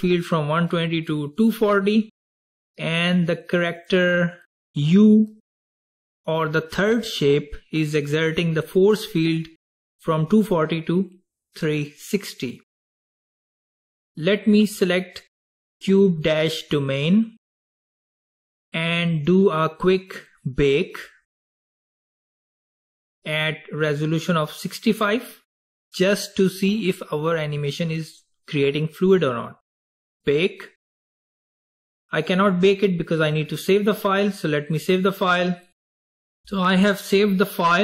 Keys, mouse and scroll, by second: 3.9 click, 14.7 click, 30.0-33.0 drag.